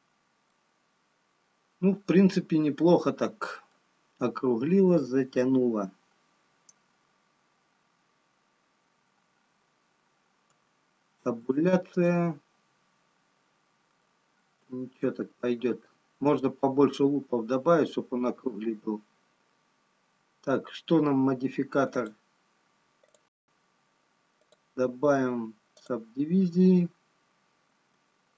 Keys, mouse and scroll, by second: 2.4 middle click, 11.7 Tab, 13.1 middle click, 15.5 Tab, 19.6-20.4 scroll up 1, 20.6-22.1 scroll down 1, 22.1 click, 25.4 click, 28.0 Tab.